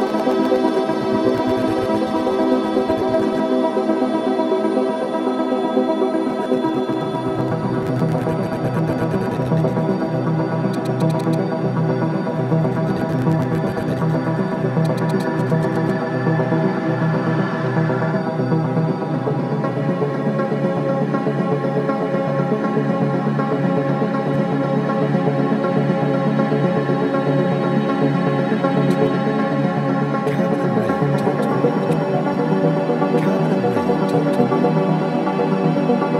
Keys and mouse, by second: 3.3-4.1 drag, 4.3 alt+click, 4.7-5.2 drag, 5.9 click, 15.8 click, 16.0-18.4 typing, 16.7-17.7 ctrl+alt+drag, 17.9 click, 19.0-21.1 drag, 20.9-22.4 typing, 24.1 click, 24.3-29.5 typing, 28.1-29.7 shift+drag, 31.8-32.5 typing, 32.3-34.5 drag, 34.5 typing, 35.3 right click, 35.4 click, 36.0 ctrl+alt+right drag.